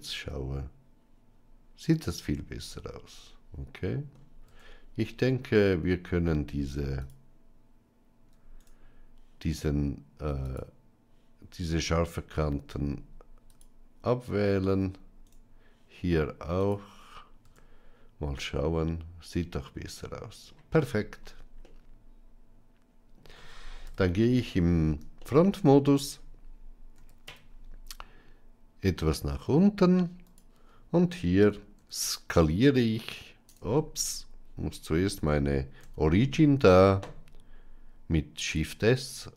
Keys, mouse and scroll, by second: 4.3 Tab, 10.7 right click, 13.4 alt+click, 16.6 right click, 17.3 Tab, 18.3-20.4 middle drag, 21.5-23.1 middle drag, 23.7 KP_1, 25.1 shift+middle click, 26.9 g, 31.7 s, 35.7 shift+s.